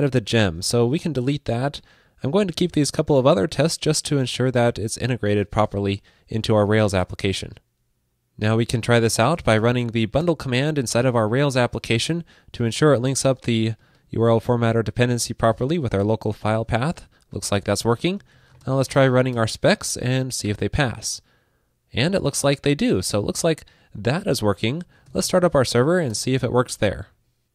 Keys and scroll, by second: 5.7 super+s.